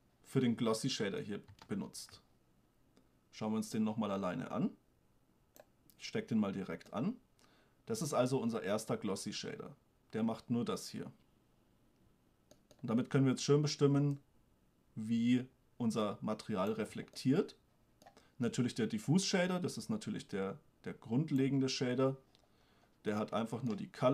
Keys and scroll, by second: 2.1 shift+space.